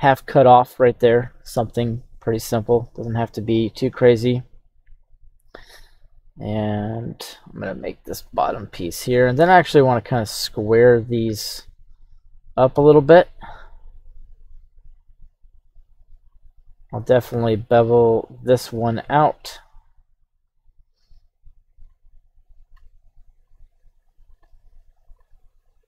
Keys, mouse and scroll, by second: 1.6-4.8 scroll up 1.